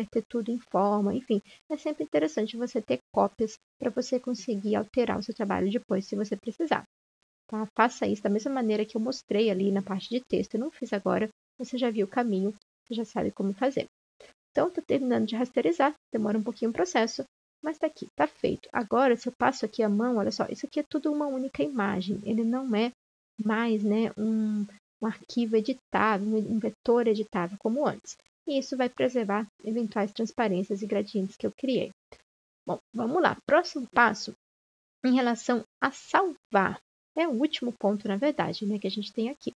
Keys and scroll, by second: 22.9 ctrl+z.